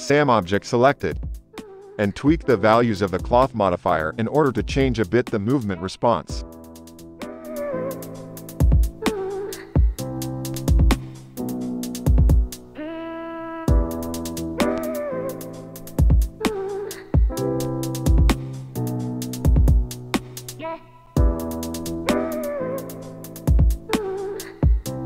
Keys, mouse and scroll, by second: 0.1-6.2 drag, 7.0 shift+Left, 8.4 space, 13.4 space, 14.7-19.0 drag, 19.1 shift+Left, 19.1 shift+click, 19.2 space, 20.5-24.6 drag, 21.9 space, 24.7-25.0 shift+drag.